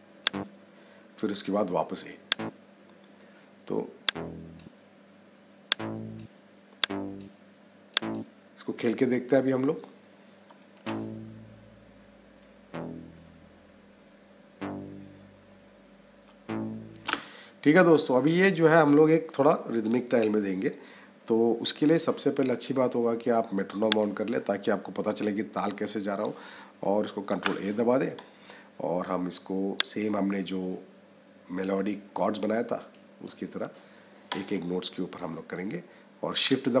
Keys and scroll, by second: 10.6 -, 16.9 -, 27.1 ctrl+a.